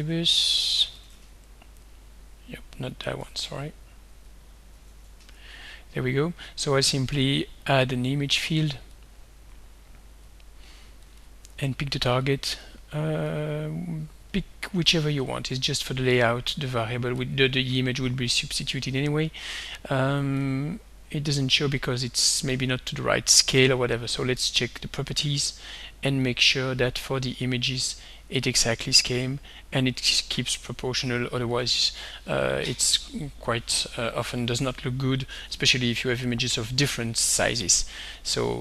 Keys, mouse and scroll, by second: 0.0 alt+Tab, 0.8 alt+Tab, 3.0 click, 3.3 alt+Tab, 4.7 alt+Tab, 7.9 click, 9.0-10.4 drag, 11.1 click, 12.3 click, 12.7 click, 13.2 click, 17.2 click, 20.4-21.5 drag, 22.4 click, 23.7 right click, 25.2 click, 26.3 click, 27.6 click, 28.7 click, 30.0 click, 30.6 click, 31.1 click, 31.6 click.